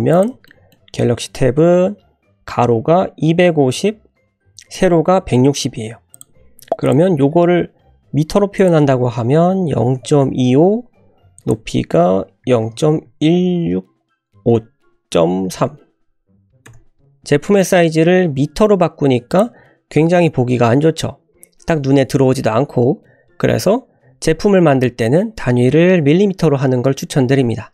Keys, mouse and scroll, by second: 0.4 shift+scroll up 1, 0.5 shift+middle click, 0.7 scroll down 1, 6.1 click, 6.8 click, 8.6-10.8 drag, 11.3-17.0 drag, 19.3 click.